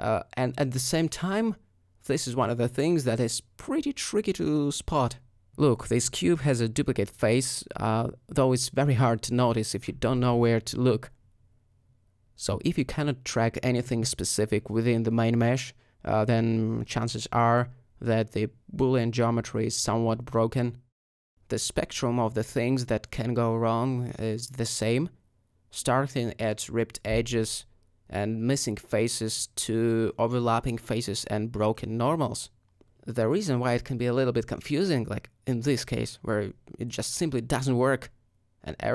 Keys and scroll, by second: 3.9 Tab, 7.8 Tab, 17.2 alt+a, 18.6 alt+m, 21.6 Tab, 24.5 alt+Tab, 25.8 a, 28.8 alt+m, 29.6 Tab, 36.5 alt+a, 37.6 g, 37.6 z.